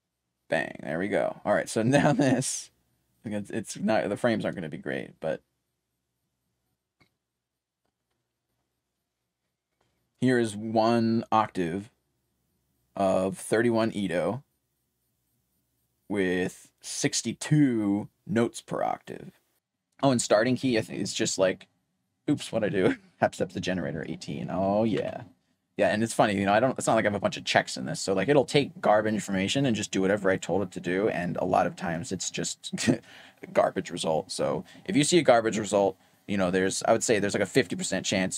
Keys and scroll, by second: 0.0-0.3 typing, 19.5-20.6 typing, 23.4-24.3 typing, 25.4 typing.